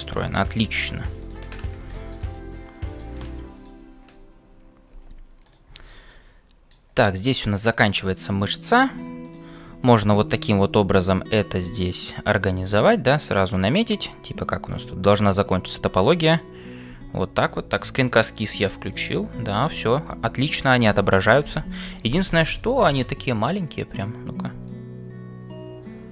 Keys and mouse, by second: 2.4-18.4 drag.